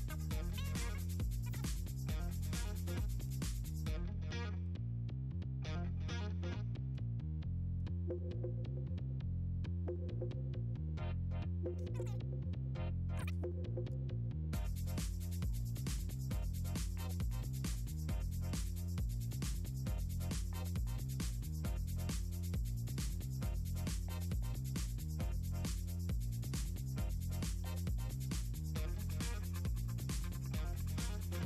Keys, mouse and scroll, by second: 0.4-1.4 typing, 2.2 scroll down 2, 3.4 click, 3.8-4.5 scroll down 6, 6.7 right click, 7.0 click, 7.2 scroll up 2, 7.4 scroll down 2, 8.3 scroll up 2, 9.7 click, 10.0 click, 11.8 middle click, 11.8 scroll up 2, 13.1 click, 13.5 v, 15.0 click, 15.4 click, 18.8 click, 19.4 click, 19.4-20.8 typing, 20.6 click, 21.9 click, 22.8 scroll down 2, 22.9 scroll up 2, 23.3 scroll down 2, 23.5 scroll up 2, 24.4 scroll down 2, 25.0 scroll up 2, 25.5 click, 25.6 click, 26.3 click, 26.8 Return, 27.2 click, 27.5-28.4 typing, 28.6-29.0 scroll down 4, 29.9-30.4 scroll down 6, 30.6 scroll up 2, 31.3 scroll down 2.